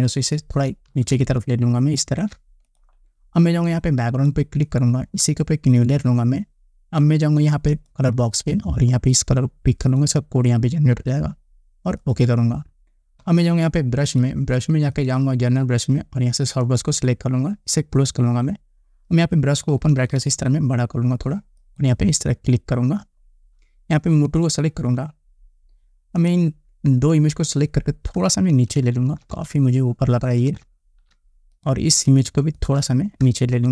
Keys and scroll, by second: 19.9 ], 28.5 shift+Down, 33.5 shift+Down.